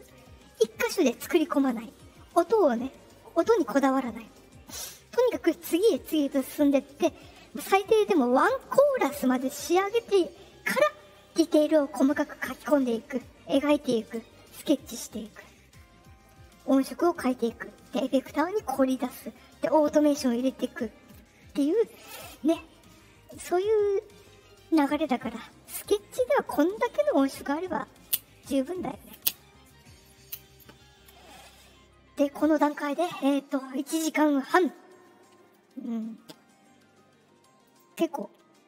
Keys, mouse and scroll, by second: 37.6 click.